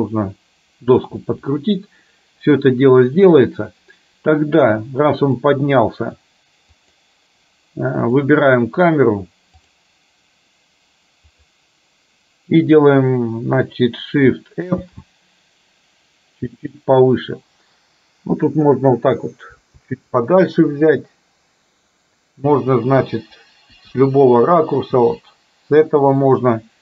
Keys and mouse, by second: 5.7 click, 7.0 click, 9.7 click, 11.3 click, 15.0 shift+f.